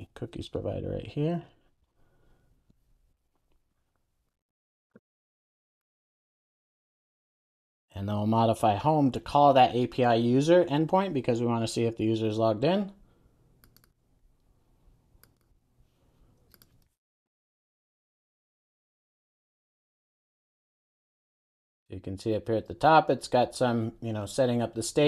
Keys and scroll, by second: 1.9 Return, 4.7 super+x, 5.8 super+v, 6.6 alt+super+l, 7.1 super+s, 17.0 super+a, 20.1 Return, 20.6 super+s.